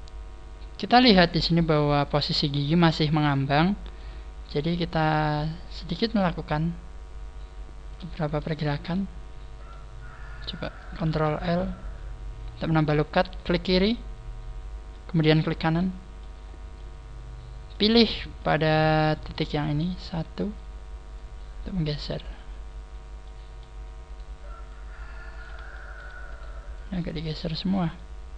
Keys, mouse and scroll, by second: 1.0-1.4 scroll up 4, 1.4 middle click, 2.4 shift+middle click, 3.0 shift+middle click, 4.0 shift+middle click, 4.4 middle click, 4.4 right click, 4.7 middle click, 6.4 click, 8.3 ctrl+z, 8.6 middle click, 10.0-10.5 scroll down 2, 11.0 ctrl+r, 15.4 right click, 15.6 middle click, 16.5 scroll up 4, 16.6 middle click, 17.9-18.3 scroll up 2, 18.3 middle click, 19.8 right click, 21.0 click, 23.2 middle click, 24.0 middle click, 24.0 right click, 24.6 click, 25.6 shift+middle click, 26.2 shift+middle click, 26.2 right click, 26.6 click, 26.7 click, 28.0 middle click.